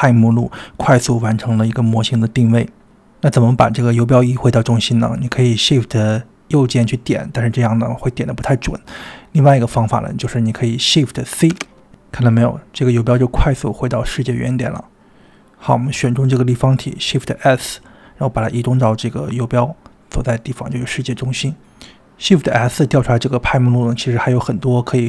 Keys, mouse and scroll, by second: 2.6 click, 3.5-5.4 ctrl+right drag, 5.4 click, 6.8 shift+right click, 7.6-8.4 middle drag, 8.6-9.4 middle drag, 9.6 shift+right click, 11.5 shift+c, 12.5-12.8 scroll up 2, 13.3 shift+middle click, 13.3 scroll up 3, 14.5 click, 16.3 shift+s, 19.3 click, 21.3-21.9 middle drag, 22.1-22.5 scroll down 1, 22.9-24.9 middle drag, 22.9 scroll down 1, 24.9 shift+s.